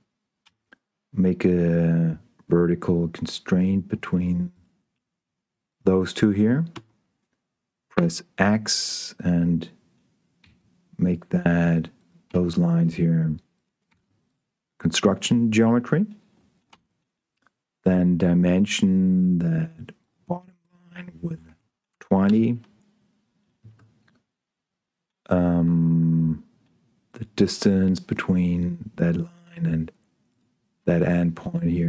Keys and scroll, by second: 0.4 s, 7.0 Escape, 7.9 x, 10.7 x, 17.0 d, 21.9 0, 22.2 Return, 23.6 Tab.